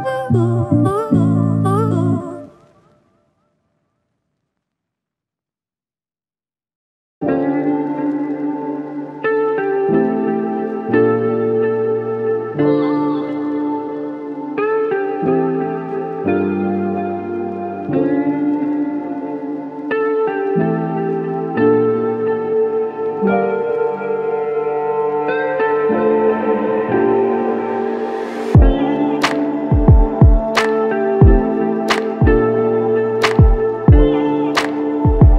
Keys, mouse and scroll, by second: 8.2 ctrl+z, 8.7 ctrl+z, 10.8 ctrl+click, 12.5 alt+click, 13.8 ctrl+click, 15.4 ctrl+click, 16.5 ctrl+click, 21.9 alt+shift+click, 22.6 alt+click, 23.6 shift+click, 24.7 ctrl+click, 26.7 ctrl+click, 28.8 shift+click, 29.8 ctrl+click, 32.7 alt+click, 33.6 ctrl+click, 34.6 ctrl+click, 35.1 shift+click.